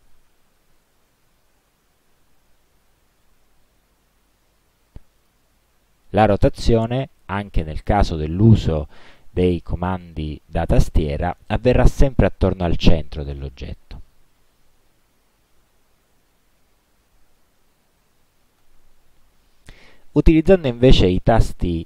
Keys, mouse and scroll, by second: 5.3 click, 12.3-14.0 drag.